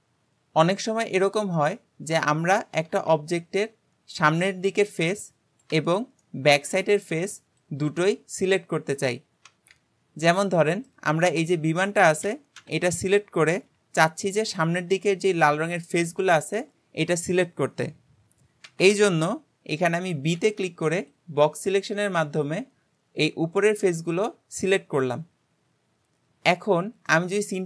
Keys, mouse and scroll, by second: 1.0-1.5 scroll up 2, 1.6-2.9 middle drag, 2.9 Tab, 6.3-9.7 middle drag, 10.5-12.6 middle drag, 12.6 KP_7, 27.1-27.6 middle drag.